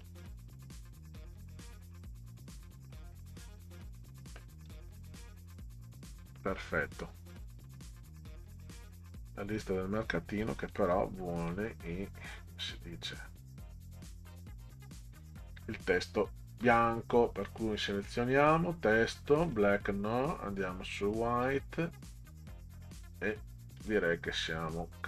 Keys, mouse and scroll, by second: 1.7-2.4 middle drag, 2.6 click, 4.6 click, 8.1 middle click, 10.4 click, 10.7 click, 11.5 click, 13.3-15.8 drag, 18.2 click, 19.4 click, 20.2-20.6 scroll down 4, 21.4 scroll down 2, 22.9 click, 23.8 click.